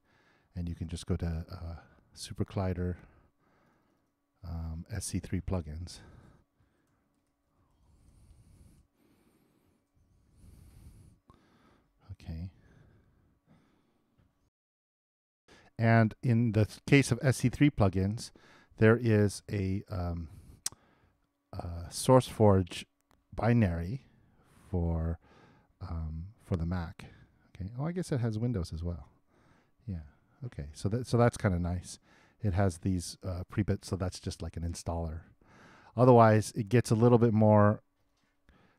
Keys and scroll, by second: 14.4 alt+Tab.